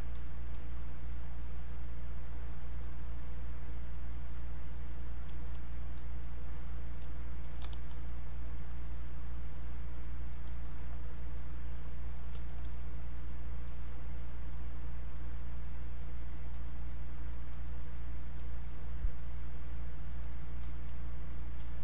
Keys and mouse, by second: 7.6 e, 8.3-12.3 drag, 12.3 q, 12.9-21.8 drag.